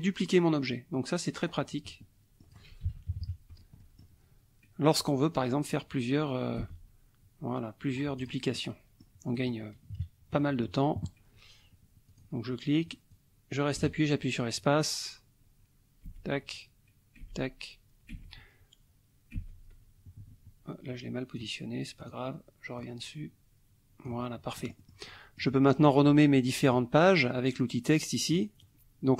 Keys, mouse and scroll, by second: 1.5-2.7 scroll down 4, 1.6 click, 2.9 ctrl+z, 3.1 ctrl+KP_Subtract, 3.8 click, 5.0-8.5 drag, 6.6 space, 8.6 click, 9.4 click, 9.9 KP_Subtract, 10.4 click, 12.1 click, 13.1-21.6 drag, 13.8 space, 17.2 space, 18.2 space, 19.4 space, 22.0 click, 22.8-24.3 drag, 24.6 middle click, 28.3 click.